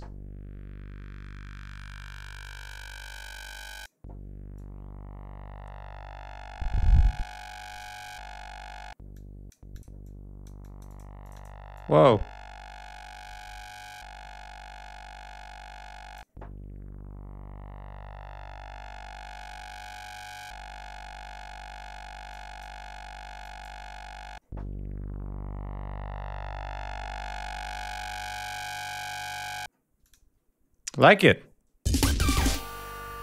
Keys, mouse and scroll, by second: 2.2 click, 3.0 click, 4.4-7.8 drag, 9.0 click, 9.6 click, 9.9 click, 11.1 click, 11.6-16.2 drag, 22.1 click, 23.2 click, 29.9 click, 31.0 click, 31.7 space, 32.1-33.2 drag.